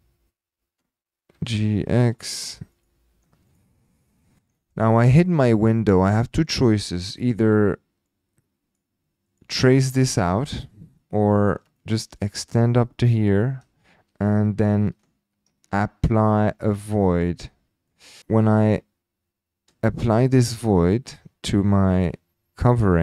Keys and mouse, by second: 0.0-1.5 typing, 2.0-2.4 drag, 2.8 shift+click, 3.0 shift+t, 3.5 click, 3.8 middle drag, 4.2 shift+middle click, 4.5 middle drag, 4.9-5.2 shift+middle drag, 5.5 shift+click, 7.0 shift+right click, 8.1 click, 9.4 click, 10.1-10.7 middle drag, 10.9 shift+middle click, 11.3-11.6 middle drag, 11.8 shift+middle click, 11.8 shift+click, 12.2 shift+click, 13.3 typing, 16.5 shift+click, 17.4 click, 17.9 middle click, 20.1 shift+click, 22.7 click.